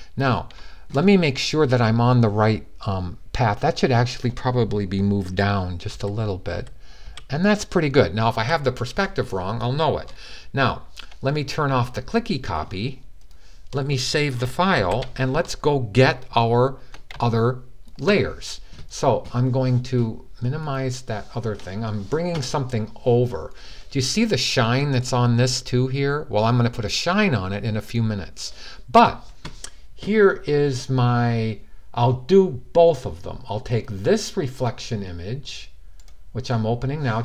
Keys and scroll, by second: 5.6 Down, 6.3 Down, 6.8 Down, 8.1 Down, 14.6 super+s.